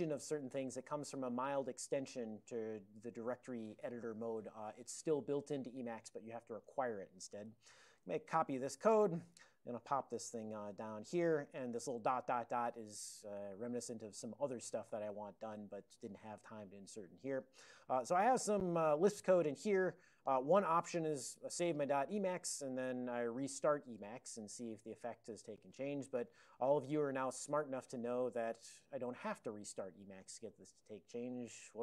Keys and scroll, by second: 0.5 ctrl+p, 0.7 ctrl+p, 0.9 ctrl+p, 6.3 ctrl+space, 7.1 ctrl+n, 7.2 ctrl+n, 7.9 alt+w, 8.5 super+j, 10.1 Return, 10.4 ctrl+y, 11.1 ctrl+p, 12.7 ctrl+k, 13.2 ctrl+k, 13.9 ctrl+p, 14.7 ctrl+l, 15.5 ctrl+p, 16.0 ctrl+p, 16.1 ctrl+p, 16.4 ctrl+l, 18.1 ctrl+p, 18.3 ctrl+p, 21.1 ctrl+x, 21.3 ctrl+s.